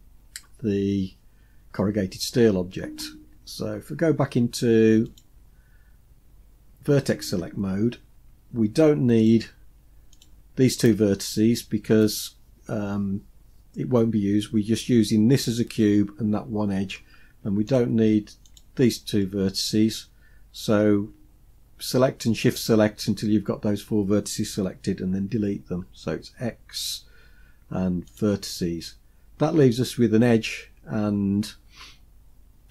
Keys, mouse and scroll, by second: 5.1 click, 7.8 scroll up 3, 9.2 click, 10.2 shift+click, 17.7 shift+click, 18.5 shift+click, 25.8 x.